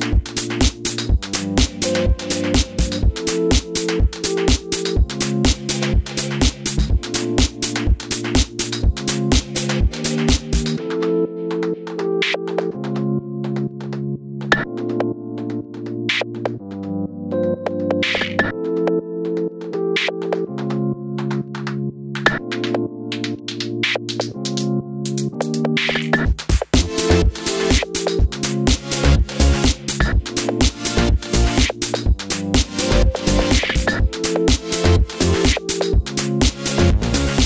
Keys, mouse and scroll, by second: 0.6 click, 0.9 g, 1.5 click, 2.8-9.1 shift+middle drag, 3.0-5.1 scroll down 2, 5.3-5.7 scroll up 2, 5.7 Tab, 7.0 shift+a, 8.0 g, 9.1 click, 9.2 scroll down 2, 9.5-13.8 scroll up 2, 13.8-18.9 shift+middle drag, 15.6 e, 18.9 click, 19.1 2, 19.2 click, 20.5-22.2 drag, 21.1 e, 21.9 ctrl+z, 22.5 e, 22.9 click, 24.8 ctrl+r, 25.6 1, 25.9 click, 26.2 g, 26.9 scroll up 1, 27.2 ctrl+r, 28.3 click, 29.0 g, 29.9 click, 30.1-30.5 scroll down 1, 30.5 click, 30.8 g, 32.8 click, 33.1 shift+middle click, 33.2 scroll up 2, 33.9 click, 34.2-34.5 scroll down 2, 34.5 ctrl+r, 35.3 click, 36.4 2, 36.5 click, 36.9 e.